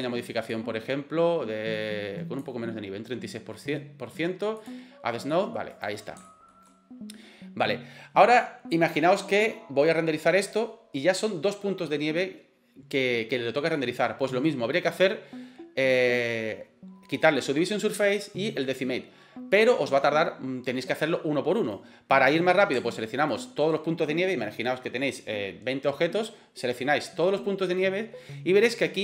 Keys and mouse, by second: 0.5-2.4 drag, 4.6 click, 5.4 middle click, 5.7 right click, 6.2 shift+middle drag, 6.7-7.6 middle drag, 21.6 right click, 23.3 shift+right click.